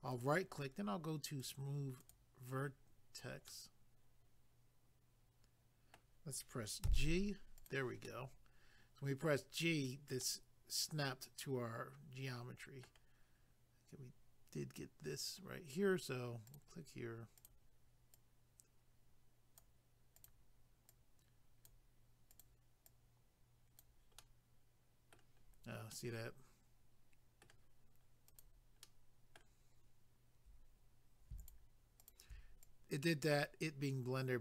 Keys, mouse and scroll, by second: 0.1 right click, 1.4 click, 3.5 middle click, 6.8 g, 7.5 click, 8.0 middle click, 10.2 middle click, 13.4 scroll up 1, 16.5 click, 17.4 click, 20.2 click, 22.3 click, 24.2 middle click, 25.4 scroll down 1, 25.9 middle click, 28.3 click, 28.8 middle click, 31.4 shift+click, 32.6 click.